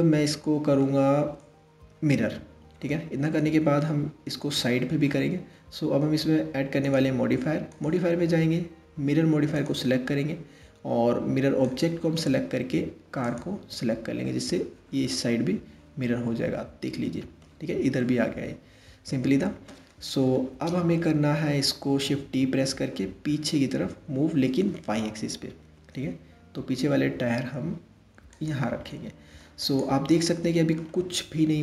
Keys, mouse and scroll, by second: 1.9-2.3 scroll down 2, 2.4-5.6 middle drag, 6.4 click, 7.3 click, 9.3-10.4 drag, 11.2 click, 14.7-19.9 middle drag, 19.9 KP_3, 21.9 shift+d, 28.5-29.2 middle drag, 29.2 click, 29.7-31.6 middle drag.